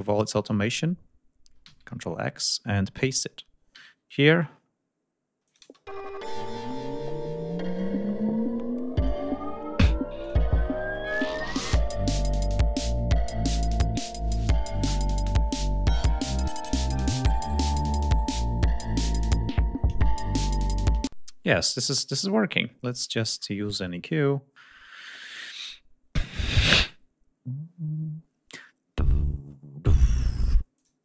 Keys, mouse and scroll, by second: 0.7 scroll up 1, 1.3 ctrl+x, 1.5-1.9 ctrl+scroll up 1, 3.4 ctrl+v, 5.1 click, 5.3 space, 6.4 click, 7.4-8.9 drag, 9.2 scroll up 2, 9.8 click, 10.6 right click, 20.3 click, 20.6 space, 21.4 right click, 21.8 right click, 23.0-23.6 scroll down 1, 30.4 click.